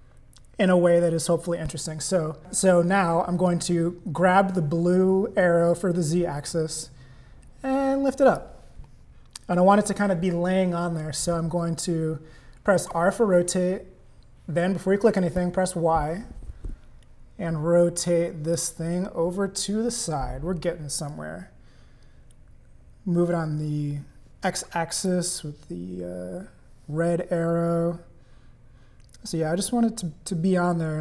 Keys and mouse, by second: 6.4-8.4 drag, 12.9 r, 21.1-25.1 drag.